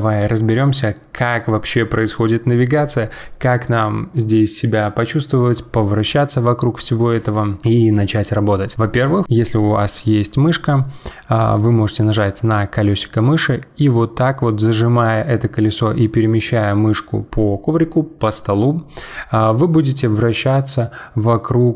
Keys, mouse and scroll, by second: 12.8-15.8 middle drag.